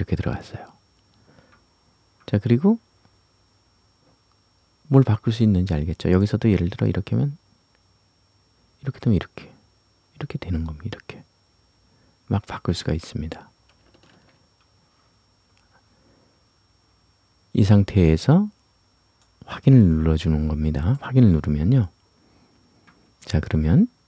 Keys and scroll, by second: 14.1 ctrl+z.